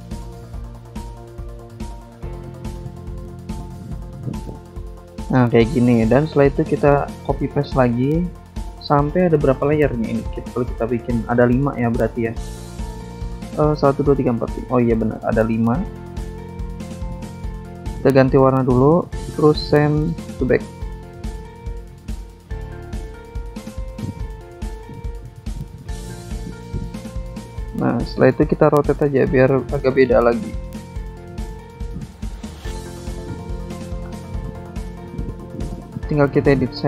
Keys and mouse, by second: 0.1 click, 1.2 click, 2.9 click, 4.7 click, 5.2 click, 7.8 click, 9.1 click, 10.9 click, 12.5 click, 13.6 ctrl+c, 14.4 click, 16.2 ctrl+alt+shift+Tab, 18.0 click, 18.3 click, 18.4 double click, 18.7 double click, 19.6 alt+Tab, 20.5 click, 21.1 click, 21.5 click, 22.4 click, 22.9 click, 23.6 ctrl+click, 25.3 ctrl+click, 26.0 click, 26.8 ctrl+click, 29.0 click, 29.7 click, 30.5 shift+click, 31.7 ctrl+click, 32.1 ctrl+click, 35.5 click, 35.6 double click, 36.3 double click, 36.8 double click.